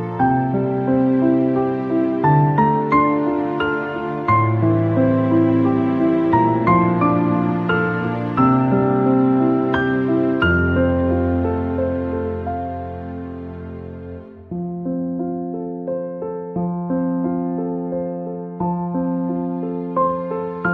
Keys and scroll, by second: 19.9 ctrl+-.